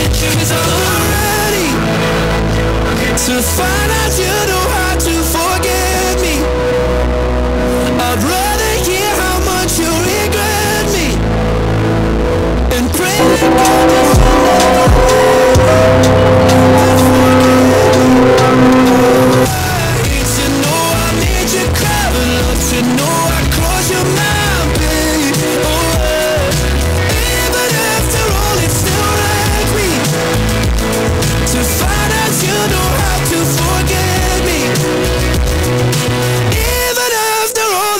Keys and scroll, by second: 19.5 Page_Down.